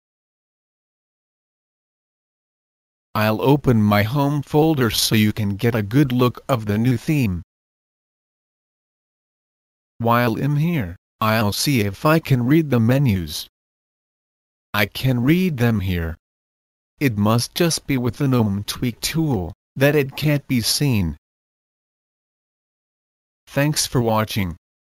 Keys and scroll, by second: 1.1 Return.